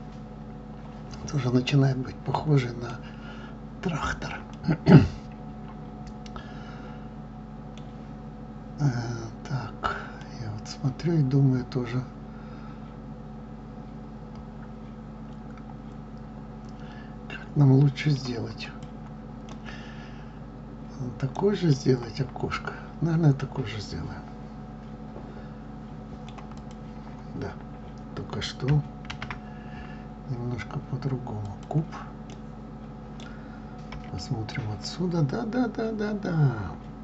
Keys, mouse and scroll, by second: 4.5-7.4 middle drag, 10.2-13.2 middle drag, 18.6 click, 19.4-26.6 middle drag, 26.6 click, 31.4 shift+a, 32.3-33.9 middle drag, 33.9 KP_1.